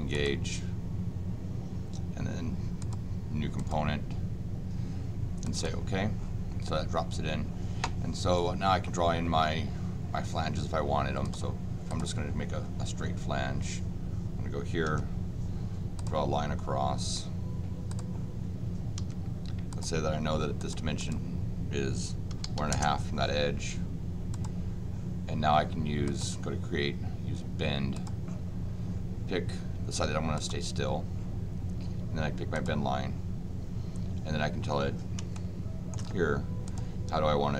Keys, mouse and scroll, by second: 0.1 click, 2.8 click, 3.5 click, 5.4 click, 11.2 click, 11.9 click, 15.9 click, 17.9 click, 18.9 d, 19.7 click, 20.6 click, 21.0 click, 24.3 click, 26.0 click, 27.9 click, 30.3 click, 32.5 click, 35.3 shift+middle click, 36.6 click.